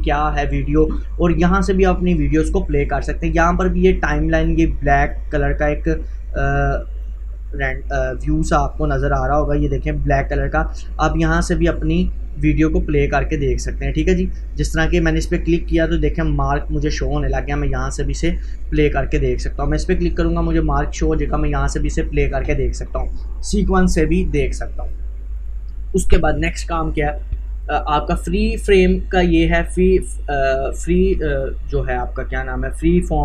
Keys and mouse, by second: 4.4-10.3 drag, 12.0-33.2 drag.